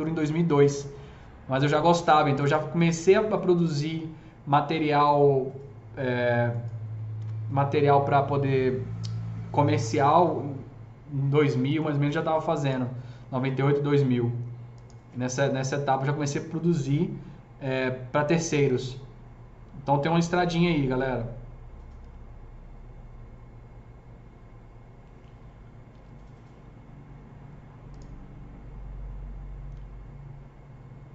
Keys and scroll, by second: 7.2 F3, 10.1 F3, 10.6 F3, 11.2 F4, 11.6 F3, 25.9 alt+q.